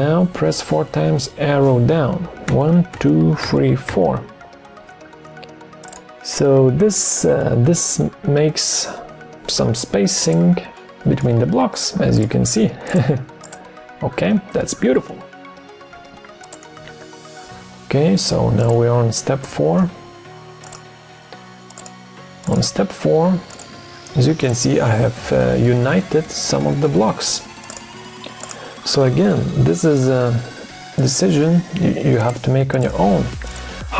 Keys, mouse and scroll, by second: 2.4 ctrl+shift+Down, 16.8 ctrl+d, 19.4 BackSpace, 32.3 shift+click, 32.8 shift+click.